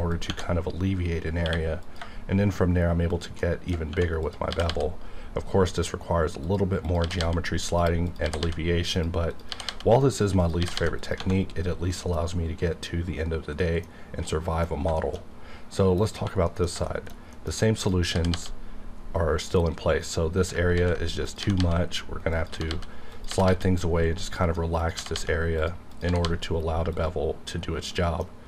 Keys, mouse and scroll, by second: 0.1 click, 0.3 Tab, 1.4 q, 1.8 click, 3.1 shift+click, 3.4 shift+middle click, 4.2 click, 4.5 g, 4.7 g, 6.4 click, 7.0 g, 7.2 g, 7.6 click, 8.2 g, 8.4 g, 8.9 click, 9.3 click, 9.5 g, 9.7 g, 10.6 g, 10.7 g, 11.0 click, 11.4-11.9 scroll down 1, 12.1 middle click, 15.0 shift+middle click, 15.3-15.8 scroll up 2, 15.8 middle click, 16.5 middle click, 16.9 shift+middle click, 17.8 click, 18.1 g, 18.3 g, 19.9 right click, 20.7 ctrl+x, 21.4-23.5 typing, 22.3 click, 25.0 g, 25.1 g, 25.6 click, 26.1 g, 26.2 g, 27.0 click.